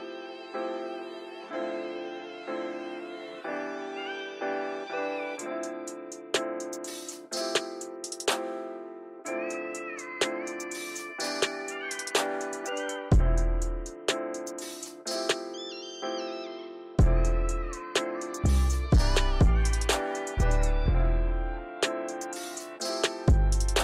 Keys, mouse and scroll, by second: 1.1 click, 1.9 click, 3.0 click, 3.7 click, 4.8 ctrl+z, 5.1 ctrl+z, 5.4 ctrl+z, 5.9 ctrl+z, 8.4-11.5 drag, 12.1 click, 12.7 shift+middle click, 12.9-13.3 scroll up 1, 14.6-17.9 drag, 18.6-20.3 drag, 21.2-23.6 drag.